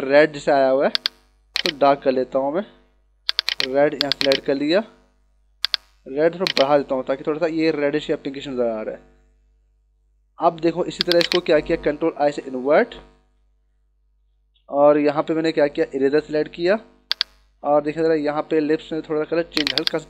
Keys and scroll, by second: 12.3 ctrl+i, 13.5 ctrl+=, 15.9 e.